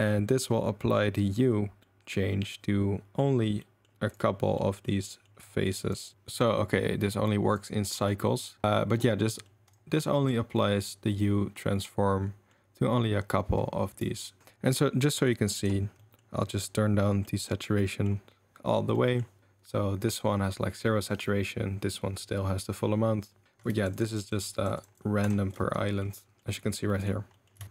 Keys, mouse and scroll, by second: 1.8-3.2 middle drag, 3.6 middle drag, 4.1 click, 4.7 middle click, 5.2 middle click, 6.0 ctrl+shift+click, 6.6 middle drag, 7.1 middle drag, 7.5 click, 8.4 middle drag, 9.2 middle drag, 10.0-12.6 middle drag, 14.4 ctrl+z, 15.2 click, 16.0-17.1 middle drag, 17.2 middle click, 17.8 middle drag, 18.9 middle drag, 23.8 ctrl+shift+click, 24.1 ctrl+shift+click, 24.2 ctrl+shift+click, 24.4 ctrl+shift+click, 24.8 ctrl+shift+click, 27.0 click.